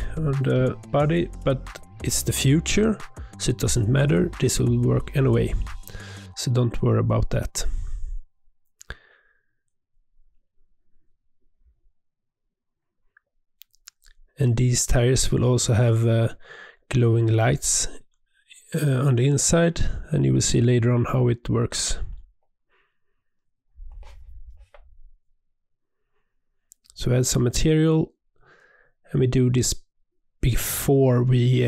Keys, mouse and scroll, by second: 0.6 click, 0.9 g, 2.5 click, 2.7 click, 2.8 click, 3.2 Tab, 3.6 ctrl+a, 4.0 click, 4.2 middle click, 5.0 click, 5.5 Tab, 5.7 Tab, 6.3 click, 6.8-7.8 middle drag, 8.2 click, 8.5-10.0 right drag, 10.0 middle click, 10.6 Tab, 10.9 alt+click, 11.3 g, 12.1 click, 12.9 shift+click, 13.5 g, 14.0 scroll down 1, 14.1 middle click, 14.5-15.0 scroll up 2, 15.0 alt+click, 15.3 e, 17.5 e, 18.6 g, 19.9 e, 21.2 e, 21.9 g, 22.7 e, 23.3 Tab, 23.7 click, 24.2 Tab, 24.7 a, 25.3 click, 25.4-27.0 drag, 27.2-28.6 drag, 28.6 e, 29.6-30.6 drag, 30.7 click, 31.3 click.